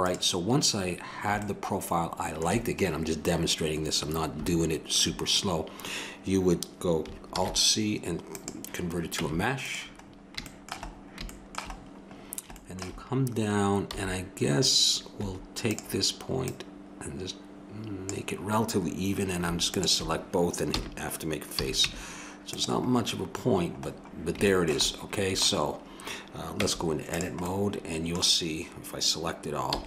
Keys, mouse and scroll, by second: 7.4 alt+c, 9.2 Tab, 13.9 b, 14.1-15.2 middle drag, 15.6-21.5 drag, 20.7 f, 21.8 Tab, 21.8 a, 26.6 Tab, 29.7 a.